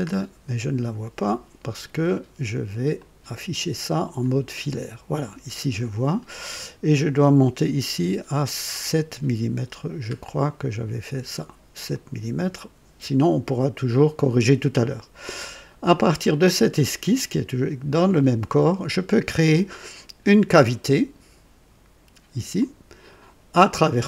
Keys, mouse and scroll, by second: 2.9 click, 4.2 click, 8.0 scroll up 2, 8.7 scroll down 1, 11.9 click, 22.5 click.